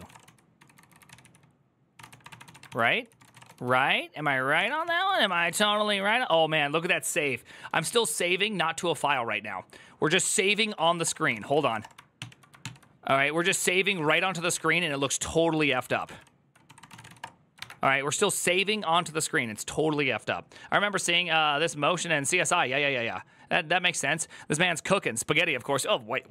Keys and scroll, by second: 0.0-6.8 typing, 11.0-12.1 typing, 13.3 ctrl+n, 13.3 ctrl+t, 13.3 ctrl+s, 13.9-14.7 typing, 15.5 ctrl+d, 15.6 ctrl+d, 15.8 ctrl+d, 16.2-17.4 typing.